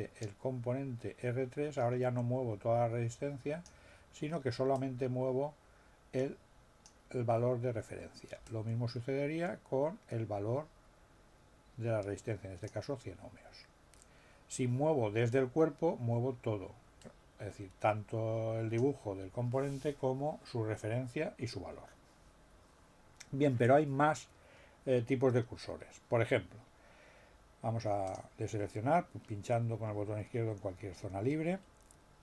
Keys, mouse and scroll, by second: 4.7-7.0 drag, 8.4-12.8 drag, 15.3-18.9 drag, 28.0 click.